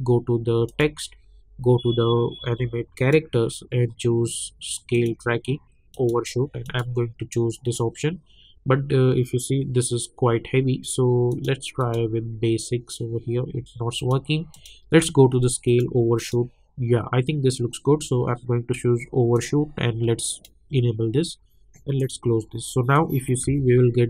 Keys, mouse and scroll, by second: 3.0 click, 11.3 click, 14.0 click, 19.3-23.5 drag, 23.5 space.